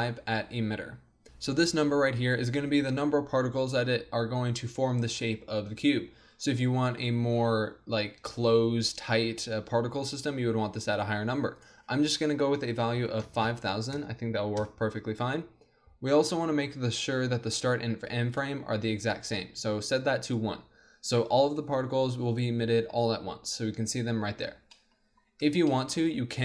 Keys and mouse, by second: 11.5-13.3 drag, 13.4 KP_0, 18.3-20.0 drag, 24.8 click.